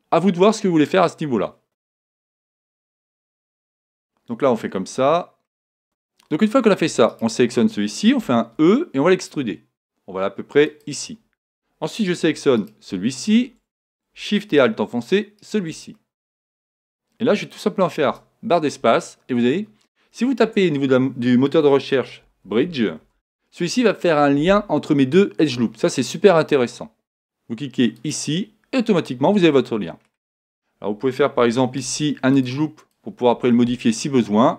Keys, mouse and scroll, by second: 3.9 KP_1, 5.5 middle click, 6.0 a, 7.1-8.9 right drag, 8.2 e, 14.1 right click, 15.4-17.1 right drag, 16.0-17.7 middle drag, 18.1 space, 28.8-30.7 middle drag, 31.8 ctrl+r, 32.9-34.5 drag, 33.7-34.5 middle drag.